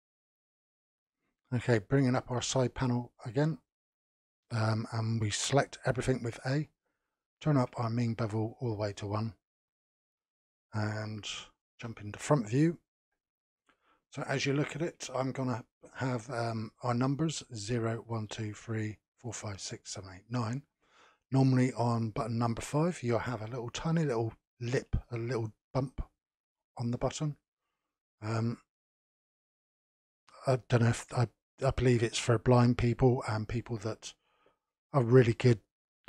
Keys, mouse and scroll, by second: 2.3 n, 5.9 a, 8.4-10.6 drag, 10.6-11.8 middle drag, 11.8 KP_1, 13.0 n, 13.5-14.2 scroll up 1, 14.2-17.2 shift+middle drag.